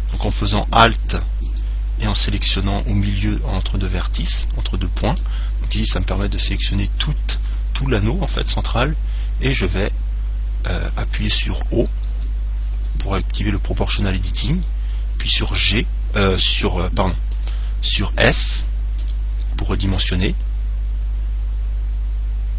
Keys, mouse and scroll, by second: 1.7 right click, 5.4-7.2 middle drag, 8.7-10.5 middle drag, 12.3 o, 15.5 g, 18.7 s.